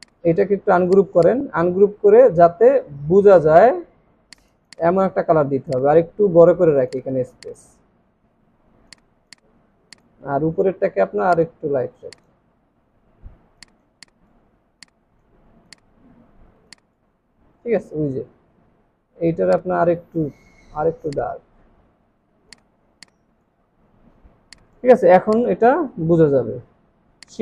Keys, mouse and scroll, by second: 0.0 right click, 4.7 double click, 6.7 alt+scroll up 1, 12.8-13.1 alt+scroll down 1, 13.9 double click, 13.9 space, 16.5 space, 18.4 alt+scroll up 1, 21.8 alt+scroll down 1, 23.8 space, 25.8 alt+scroll up 1, 27.3 shift+click.